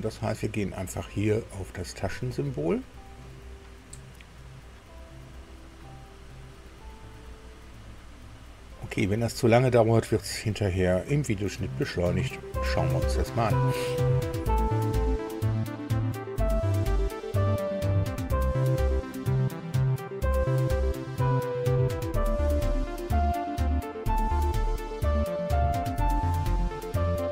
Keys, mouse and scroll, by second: 2.3 click, 18.3 click, 20.4 click, 21.0 ctrl+alt+Delete, 23.2 click, 23.5 click, 24.4 alt+Tab, 24.7 click, 25.0 alt+Tab, 26.7 click.